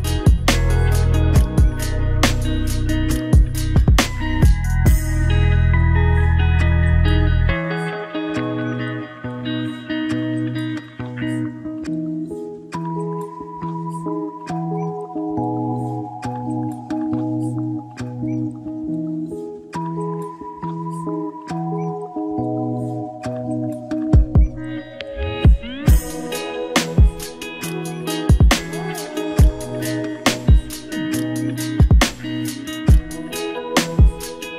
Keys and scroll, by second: 6.9 ctrl+d, 11.5 ctrl+-, 13.6 ctrl+=, 34.0 ctrl+-.